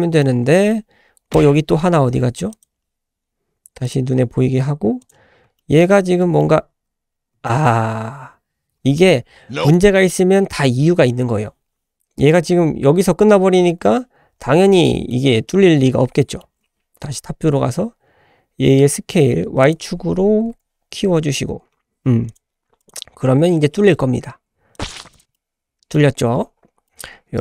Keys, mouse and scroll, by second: 0.0 middle click, 0.3 scroll down 1, 0.5 shift+middle drag, 2.5 click, 3.8-5.4 drag, 5.6-5.9 shift+middle drag, 5.9-6.4 middle drag, 6.7 `, 6.9-7.3 scroll up 3, 7.5 shift+middle click, 7.9-8.3 scroll up 1, 14.7-15.1 middle drag, 16.2-16.8 middle drag, 16.8 `, 17.2-19.2 scroll up 2, 19.6-22.4 drag, 22.8-25.3 drag, 25.3-25.9 middle drag, 26.2-26.8 scroll down 3, 26.9 shift+middle click.